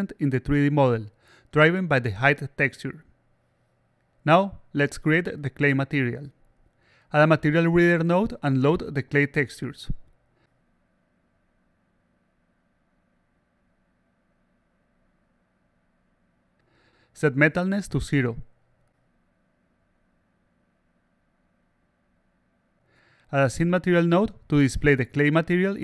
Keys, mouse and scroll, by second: 1.7-2.2 alt+drag, 2.3-2.8 alt+drag, 4.0-6.3 alt+drag, 7.5 click, 9.2-11.2 drag, 12.1 click, 13.2 click, 14.9 click, 15.0 click, 15.6 click, 17.1 click, 18.4 click, 20.1 click, 21.2 click, 21.3 click, 21.9 click, 22.5 click, 23.8 click.